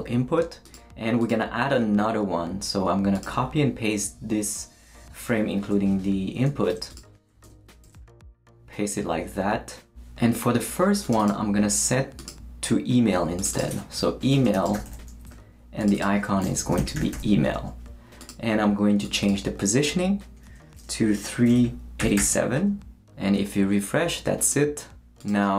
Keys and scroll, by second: 6.7 super+c, 7.4 super+Return, 7.8 super+v, 14.3-15.2 typing, 16.4-17.4 typing, 21.4-22.7 typing.